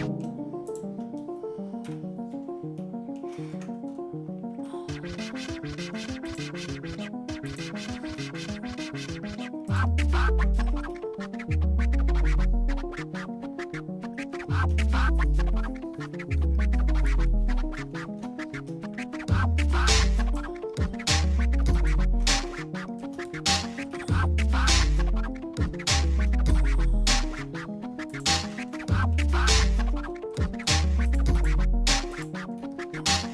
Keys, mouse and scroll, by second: 0.0 middle click, 0.2 scroll up 1, 0.7 shift+click, 1.8 KP_Divide, 2.8 shift+middle click, 3.5 Tab, 3.9-4.3 scroll up 2, 4.7 shift+middle click, 5.4 shift+middle click, 6.3 click, 7.5 ctrl+click, 8.1 middle click, 8.7-9.4 scroll up 3, 9.7 ctrl+click, 10.9-14.8 shift+middle drag, 17.7 middle click, 20.2 ctrl+click, 21.7 ctrl+shift+click, 22.5 shift+middle click, 23.2-23.8 scroll down 2, 23.9 shift+middle click, 24.8-26.2 shift+middle drag, 26.5 scroll up 1, 26.8 scroll down 1, 28.1 ctrl+click, 28.8 shift+middle click, 30.0-30.6 scroll up 3, 30.6 scroll down 1, 31.1 shift+click, 32.2 shift+click, 32.6 shift+middle click.